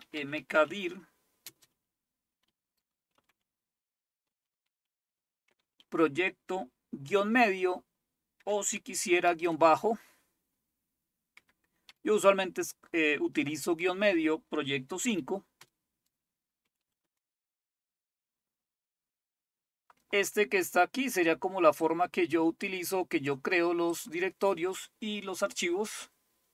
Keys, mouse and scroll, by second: 0.0-7.0 typing, 8.4-9.4 typing, 11.3-11.9 typing, 15.1 typing, 15.6 Return, 16.4-17.1 typing, 21.9-23.4 drag, 23.9 click.